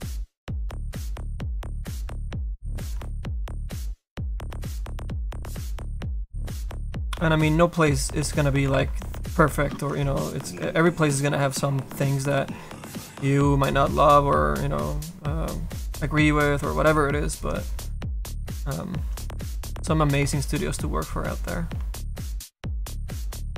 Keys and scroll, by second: 0.6 ctrl+z, 2.8 ctrl+z, 8.8 z, 10.6 ctrl+z.